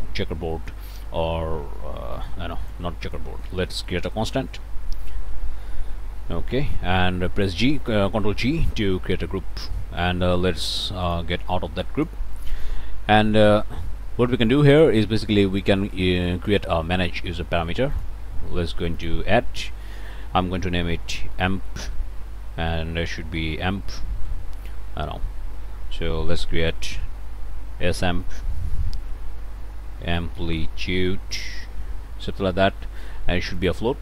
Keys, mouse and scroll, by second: 0.2 Return, 2.1 click, 2.5 click, 2.7 Delete, 3.0 click, 3.4 Tab, 4.2-5.1 typing, 5.9 Down, 6.3 Return, 7.2 ctrl+click, 8.5 ctrl+g, 11.0 click, 11.8 click, 12.3 click, 14.7 click, 15.9 click, 17.9 click, 19.0 click, 21.1-24.0 typing, 24.2 Return, 27.6-32.7 typing, 33.6 click.